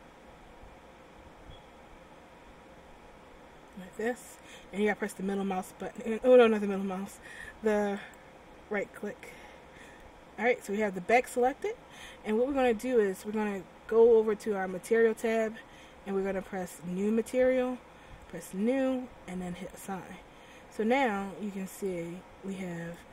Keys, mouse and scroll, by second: 9.3 middle click, 10.8 middle click, 15.0 click, 16.9 click, 18.3 click, 19.6 click, 21.9 click.